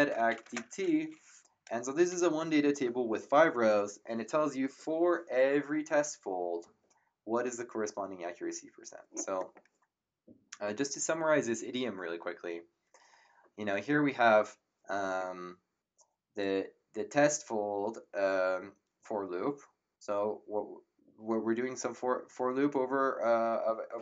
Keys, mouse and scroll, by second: 0.0-0.8 typing.